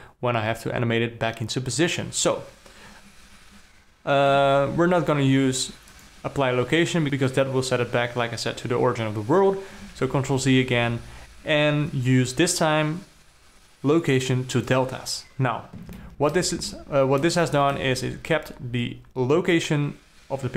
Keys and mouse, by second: 4.8 ctrl+a, 10.4 ctrl+z, 11.2 ctrl+a, 16.6 alt+middle click, 17.3-17.7 ctrl+middle drag, 17.9-18.3 alt+middle drag.